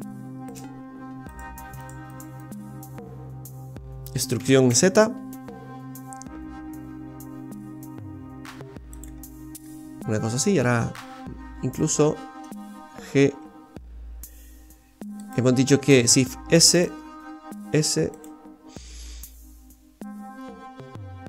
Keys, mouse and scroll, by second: 0.6 alt+shift+right click, 1.3 right click, 1.8 alt+shift+right click, 2.1 right click, 2.4 alt+shift+right click, 2.7-3.7 scroll down 6, 3.1 middle click, 4.4 e, 9.2-10.2 scroll down 6, 11.5-12.2 scroll up 6, 13.2 g, 16.0 shift+s, 17.1 s, 18.5-19.3 scroll up 1, 19.3 scroll down 1, 20.1-21.2 scroll down 6.